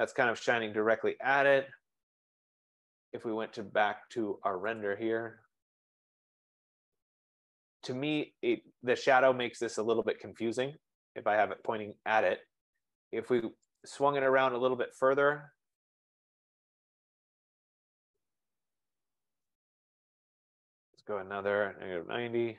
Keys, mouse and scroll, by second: 2.0-2.8 typing, 5.0-9.9 drag, 13.9 click, 15.0-19.9 typing, 17.3-18.9 drag, 21.0 click, 21.3-22.5 typing.